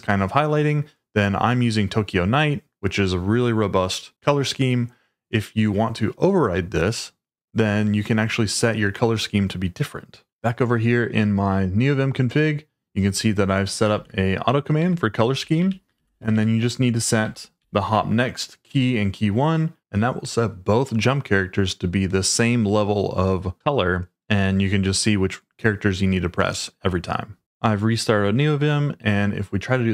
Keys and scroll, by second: 13.9 shift+v, 14.8 Escape, 15.1-18.4 typing, 17.2 Escape.